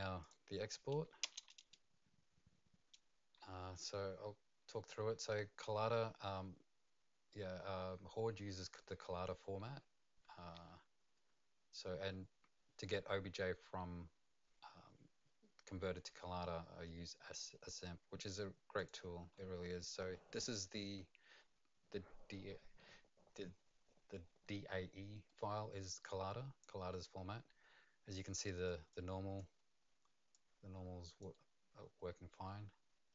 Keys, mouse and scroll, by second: 0.2 click, 1.2 Return, 18.8 click, 25.3 right click, 28.9 right click, 28.9 click, 33.0 click, 33.0 right click, 33.0-33.1 scroll up 1.